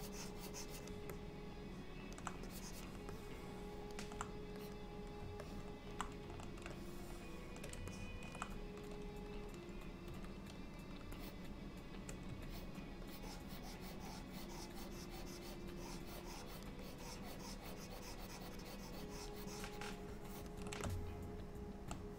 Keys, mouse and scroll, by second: 1.2 alt+middle click, 2.5 click, 3.2 alt+middle click, 5.2 click, 5.5 middle click, 6.8 shift+middle click, 8.0 ctrl+middle click, 10.1 f, 11.2 shift+click, 12.6 ctrl+click, 13.1 ctrl+click, 16.9 ctrl+click, 17.9 ctrl+click, 18.7 ctrl+click, 20.9 middle click.